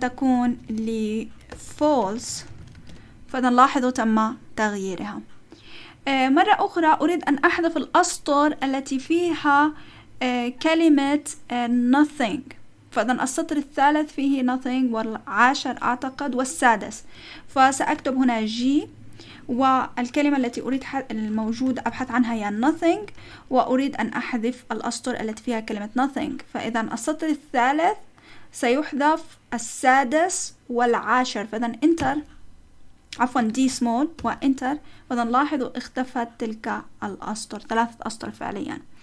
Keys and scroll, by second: 0.0-3.4 typing, 0.4 Right, 0.6 Right, 0.7 Right, 0.9 Right, 17.5-18.4 typing, 20.6-23.9 typing, 32.0 shift+d, 33.2 BackSpace, 33.8 d, 34.2 Return.